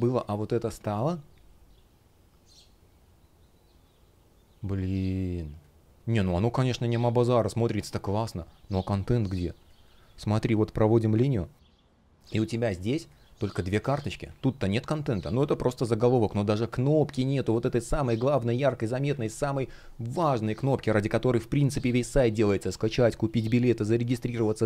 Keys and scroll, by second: 12.0 space, 15.3 super+я, 18.9 super+я.